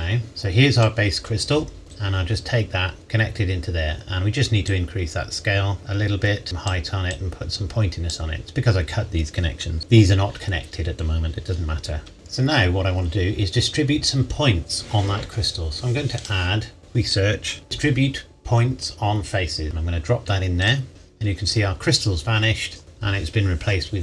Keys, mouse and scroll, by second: 0.3 click, 1.8-2.2 scroll down 1, 2.2 click, 3.0-4.6 scroll up 1, 4.6 click, 16.1 click, 19.6 click.